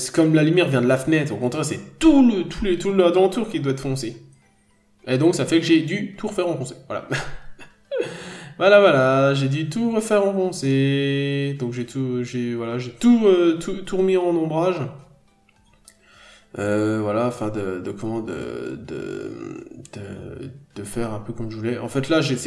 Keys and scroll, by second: 0.6 ctrl+z, 3.7 scroll down 1, 3.9 n, 4.1-4.5 scroll up 1, 5.4-5.8 scroll up 1, 10.7 p, 12.5-12.8 scroll down 1, 14.9-15.3 scroll down 1, 15.5-15.9 scroll up 1, 16.2 ctrl+z.